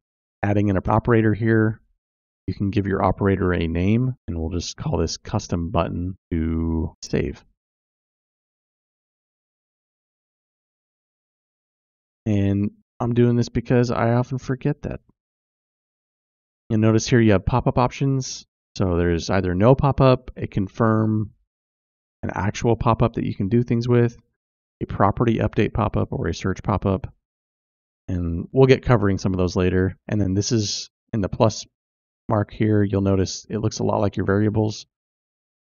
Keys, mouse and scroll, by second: 2.3-9.3 drag, 6.0 t, 10.2-16.6 drag, 17.6-28.0 drag.